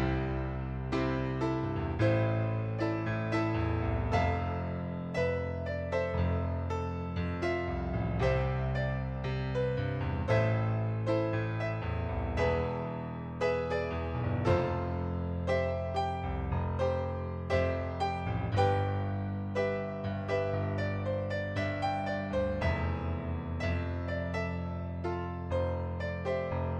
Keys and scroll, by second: 2.0 ctrl+z, 4.9-5.7 typing, 16.8 ctrl+d, 22.8 ctrl+d, 25.8 Delete.